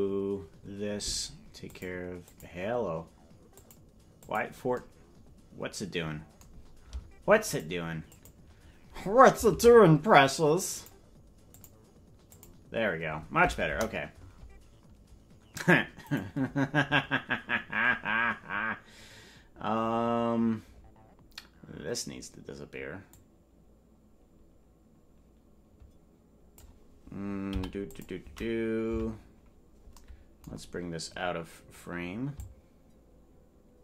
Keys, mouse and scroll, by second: 1.6 click, 2.2 click, 3.5 click, 4.2 click, 7.4 click, 8.1 click, 9.5 ctrl+Tab, 10.7 click, 11.5 click, 12.2 click, 13.6 KP_0, 16.1 right click, 23.1-26.6 drag, 27.4 i, 28.9 Right, 30.5-32.3 scroll down 1, 32.3-33.8 shift+drag, 32.3 scroll down 2.